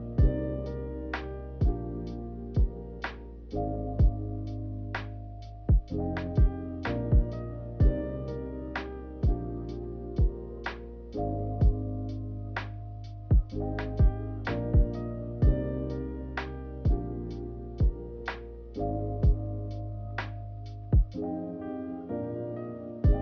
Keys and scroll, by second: 5.3 ctrl+h.